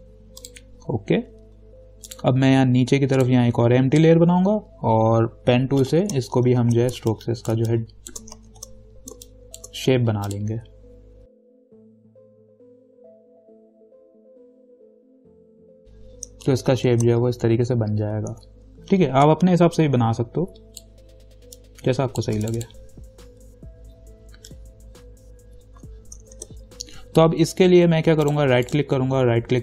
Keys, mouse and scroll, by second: 6.2 p, 6.6 ctrl+=, 6.9 ctrl+=, 7.2 space, 7.3 click, 7.7 space, 8.7 ctrl+=, 9.4 space, 9.5 click, 11.3 ctrl+click, 11.8 ctrl+click, 11.9 space, 12.0 click, 12.3 shift+click, 12.4 shift+click, 12.6 ctrl+z, 12.8 alt+click, 13.2 ctrl+click, 13.7 ctrl+-, 13.9 space, 13.9 click, 13.9 space, 14.1 click, 14.5 ctrl+click, 14.7 right click, 14.9 click, 15.6 right click, 15.7 click, 16.7 ctrl+-, 18.5 ctrl+t, 19.5-22.6 shift+drag, 26.5 ctrl+-, 28.5 click, 28.9 right click.